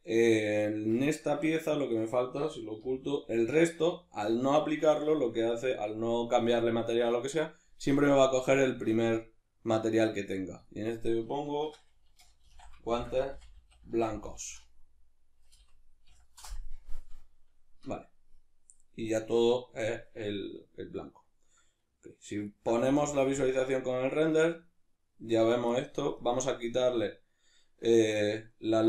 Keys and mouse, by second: 0.1 right click, 1.0 Tab, 2.9 h, 8.0 click, 9.2-21.0 drag, 15.5 BackSpace, 16.4 Return, 19.7 Tab, 21.0-26.2 ctrl+middle drag, 22.8 z, 26.2-28.8 drag.